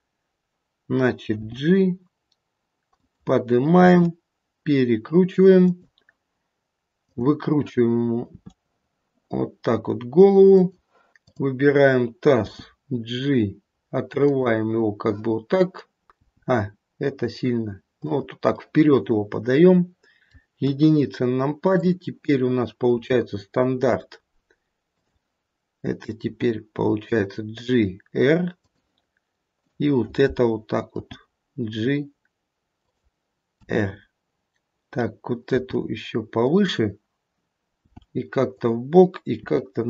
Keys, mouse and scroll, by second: 1.3 g, 3.9 r, 7.1 click, 8.3 r, 11.2 click, 12.5 g, 16.0 middle click, 18.5 middle click, 18.5 g, 20.6 KP_1, 21.8 click, 23.0 g, 26.3 r, 29.6 click, 31.0 g, 33.4 r, 35.4 g, 37.8 g, 39.4 r.